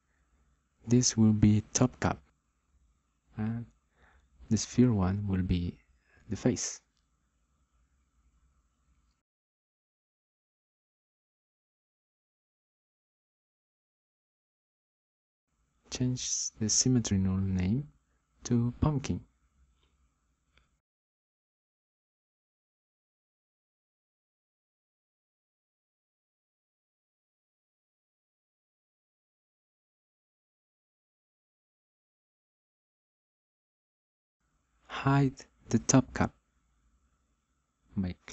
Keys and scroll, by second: 3.8-6.2 typing, 9.9 Return, 13.5-14.6 typing, 14.7 Return, 18.0-20.9 typing, 21.7 Return.